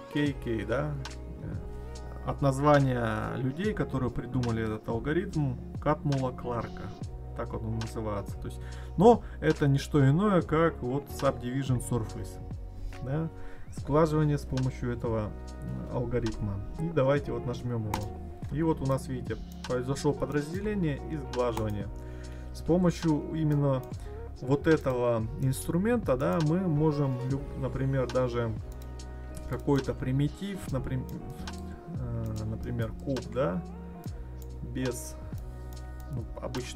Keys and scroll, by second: 22.4 ctrl+z.